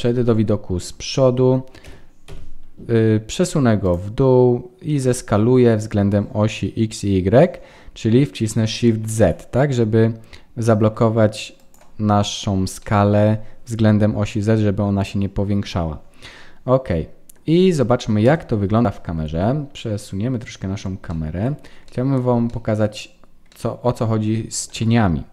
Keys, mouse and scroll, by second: 12.2-13.2 scroll down 4, 12.7 middle click, 16.2 middle click, 18.2 KP_0, 19.7 middle click, 21.1 shift+middle click, 21.5-21.9 scroll down 3, 21.9 middle click, 22.5 shift+middle click, 23.1 scroll up 1, 23.5 middle click, 24.8 ctrl+s.